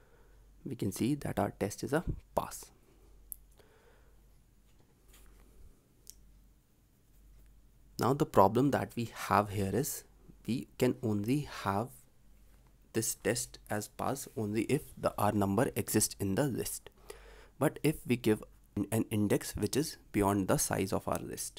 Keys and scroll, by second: 5.4 ctrl+alt+l, 6.0 ctrl+s, 14.0 ctrl+c, 17.8 ctrl+v.